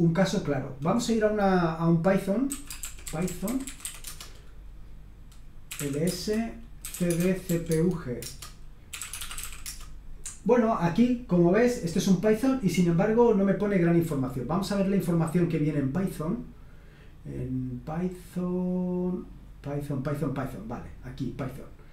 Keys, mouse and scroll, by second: 0.5 click, 2.2-4.1 typing, 5.4-9.9 typing, 14.0-15.8 scroll down 1, 16.0-17.0 scroll down 2, 17.2-17.9 scroll down 2, 17.9-18.8 scroll down 1, 20.1 click.